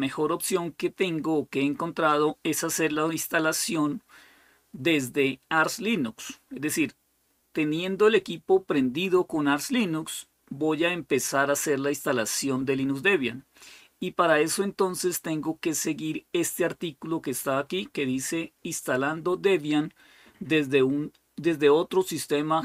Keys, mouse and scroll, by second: 16.3 click, 21.9 click.